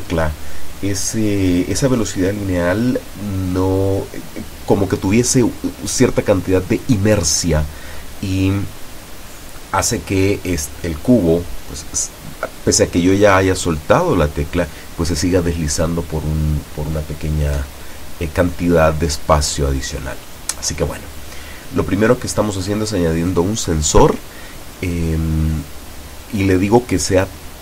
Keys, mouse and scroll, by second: 5.1 click, 6.7 click, 9.6-10.5 drag, 12.7 click, 14.4 click, 15.8 click, 20.0-21.3 drag, 23.4 click.